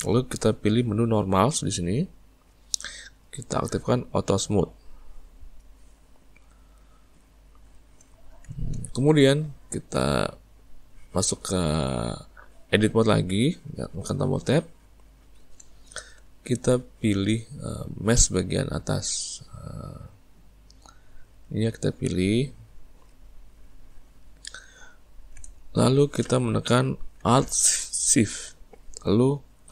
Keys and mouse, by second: 2.4-4.6 drag, 6.2-12.1 middle drag, 13.2 Tab, 15.0-18.7 ctrl+middle drag, 18.7 click, 19.9 click, 21.8-28.6 middle drag.